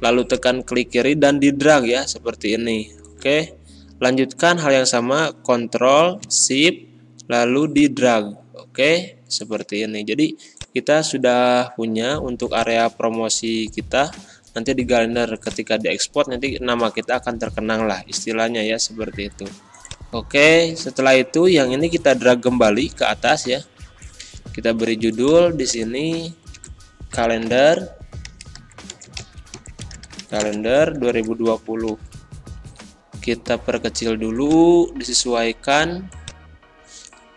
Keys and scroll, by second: 25.7 a, 26.5 ctrl+a, 27.6 shift+k, 28.3 e, 28.6 l, 28.9 BackSpace.